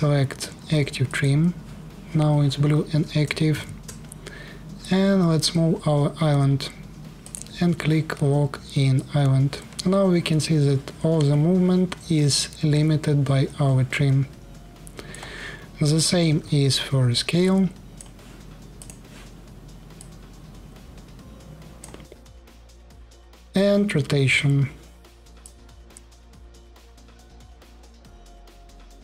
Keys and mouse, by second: 0.9-1.9 drag, 3.2 shift+f, 4.5-6.2 drag, 7.1-8.7 middle drag, 16.0 s, 18.7-19.7 middle drag, 24.0 r, 25.2-26.7 drag, 28.0-29.0 drag.